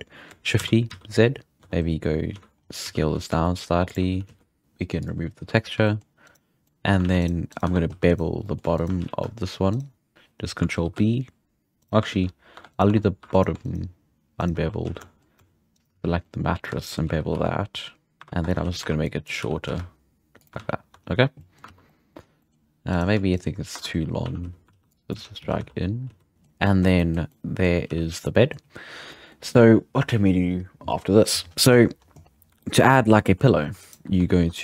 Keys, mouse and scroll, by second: 0.6 shift+d, 1.6 middle click, 1.6 Tab, 2.3 z, 2.6 scroll up 5, 2.8 s, 4.1 s, 4.6-5.0 scroll up 1, 5.0 click, 5.8-6.2 shift+middle drag, 6.2 right drag, 6.5 scroll down 1, 6.6 middle click, 7.0 alt+a, 7.2-7.6 right drag, 7.6 Tab, 7.9 2, 8.1-8.4 right drag, 8.4-8.7 middle drag, 8.7 shift+right click, 9.0 z, 9.7 shift+right click, 10.1 ctrl+v, 10.8 ctrl+b, 12.1 ctrl+z, 12.5 Tab, 12.7 right click, 12.9 Tab, 13.2 2, 13.3-13.9 right drag, 14.4 shift+right drag, 14.6 middle drag, 14.8 z, 15.0-15.7 shift+middle drag, 15.7 shift+right drag, 15.9 z, 16.0 scroll down 3, 16.2-17.3 middle drag, 17.3 ctrl+b, 18.2 Tab, 18.6-20.7 typing, 19.0 click, 20.9 Tab, 21.0-21.4 scroll down 5, 21.4-21.7 middle drag, 21.7 alt+a, 21.9 middle click, 22.1 scroll up 2, 22.4-22.9 middle drag, 22.9-23.7 right drag, 23.7 Tab, 24.2 a, 24.4 z, 24.9 click, 25.1 z, 25.4 g, 26.3-27.2 middle drag, 27.2 scroll down 1, 27.3-27.8 middle drag, 27.8 z, 28.2-32.0 middle drag, 32.0-32.6 scroll up 1, 32.6-33.8 shift+middle drag, 33.8 right click, 34.0 Tab.